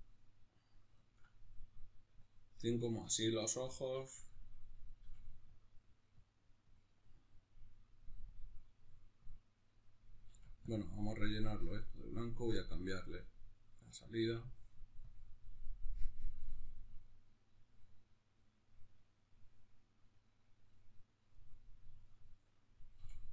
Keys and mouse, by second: 4.7 f, 5.9-7.3 drag, 7.3 middle click, 8.0-10.3 drag, 10.0 f, 10.4-23.3 drag.